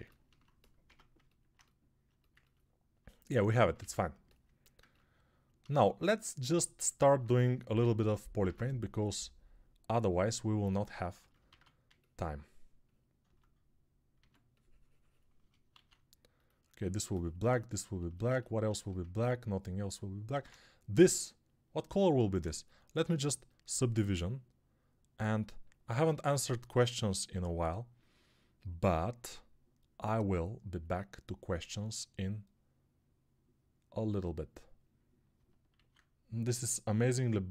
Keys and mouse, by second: 0.7 Tab, 0.7-3.6 middle drag, 3.6 ctrl+click, 3.6 ctrl+Tab, 3.7-10.4 middle drag, 8.3 ctrl+Tab, 10.4-37.5 ctrl+drag, 11.4 alt+q, 14.0 s, 15.7 alt+q, 20.2 alt+q, 35.6 alt+q.